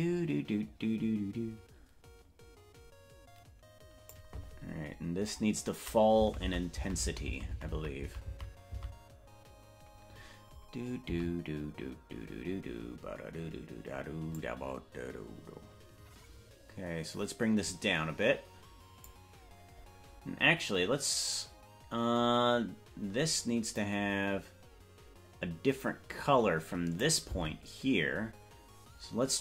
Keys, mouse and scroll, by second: 6.4 Right, 6.8 Right, 7.0 Right, 7.4 Right, 7.6 Right, 7.8 Right, 8.0 Right, 8.4 Right, 8.6 Right, 9.0 Right, 10.2-11.0 scroll up 13, 11.4 Right, 14.3-19.2 drag, 23.9-27.2 drag, 27.6 Left.